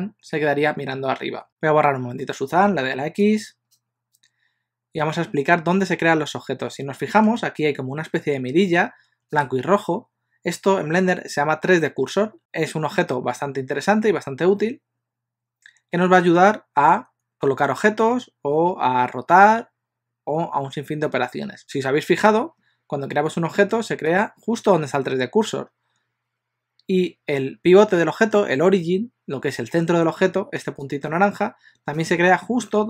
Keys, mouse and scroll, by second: 2.7 x.